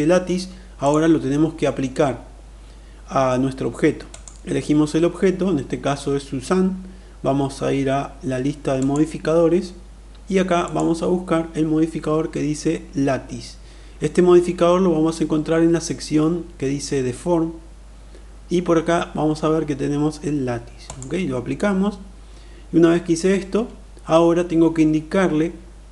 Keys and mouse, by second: 4.0 click, 8.5 click, 10.6-20.9 drag.